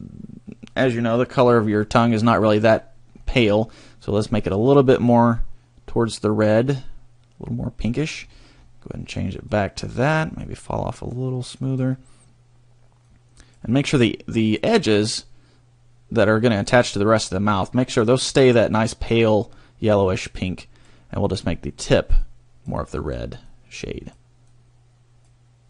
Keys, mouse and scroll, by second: 3.1 scroll up 2, 4.3 click, 8.2-9.3 scroll down 1, 9.3 click, 10.3 click, 13.1 click, 20.3 click, 21.4 click, 22.3 click, 23.0 click, 23.6 click, 24.6 click.